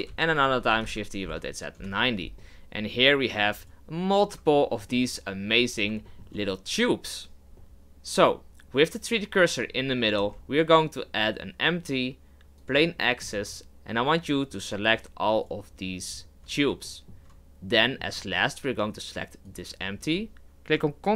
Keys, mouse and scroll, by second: 0.1 shift+d, 0.5 r, 2.4-3.6 middle drag, 3.6-4.5 right drag, 4.5-5.7 shift+middle drag, 5.7 scroll down 3, 6.1-7.6 shift+middle drag, 7.6 shift+a, 10.1 shift+a, 13.0-13.3 shift+middle drag, 13.3 scroll up 2, 14.2 right click, 14.8 shift+right click, 15.4-16.1 shift+right drag, 16.5-16.8 scroll down 1, 16.8-19.4 shift+middle drag, 19.4 shift+right click.